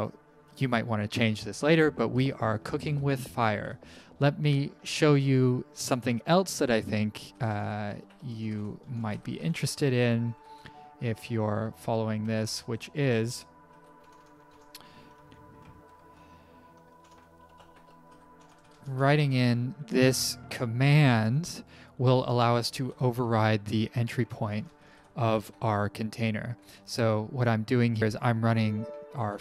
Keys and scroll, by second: 3.6 Down, 4.8 Up, 7.0-14.0 typing, 15.2-16.0 typing, 17.4-19.3 typing, 21.6-22.9 typing, 24.2-25.2 typing, 27.8-28.6 typing, 29.1 End.